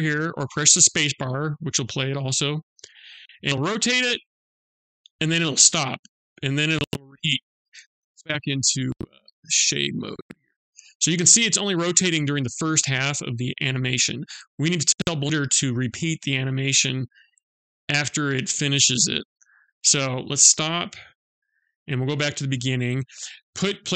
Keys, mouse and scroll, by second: 1.9 click, 9.1 click, 19.3 click, 20.7 click.